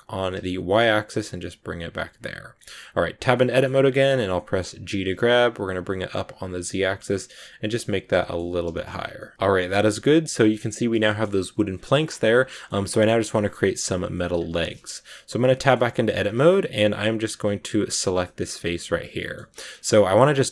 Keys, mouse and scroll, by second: 2.0 scroll down 2, 2.1 middle click, 2.5-3.0 scroll up 3, 3.0 Tab, 3.2-7.9 middle drag, 7.9 scroll up 1, 8.0 middle click, 8.3 g, 8.9 scroll down 3, 9.1-10.1 middle drag, 10.1 scroll up 2, 10.9 shift+middle click, 11.6 scroll down 5, 11.8 middle click, 12.2 scroll up 1, 12.4-14.2 middle drag, 14.2 scroll down 1, 14.4 shift+middle click, 14.8 Tab, 15.5 shift+middle click, 16.0 scroll up 2, 16.4 scroll down 1, 16.4 scroll up 1, 17.1 scroll down 2, 17.9 right click, 18.1 shift+middle click, 19.0-19.6 scroll up 3, 19.1 middle click, 19.6-20.5 scroll down 2, 19.7 shift+middle click.